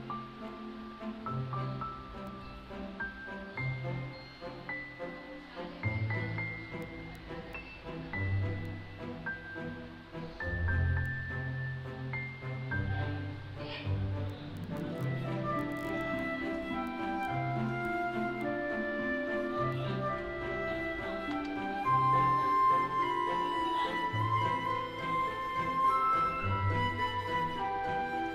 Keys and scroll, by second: 0.8 h, 6.0 l, 11.5 h, 14.9 d, 20.9 Return.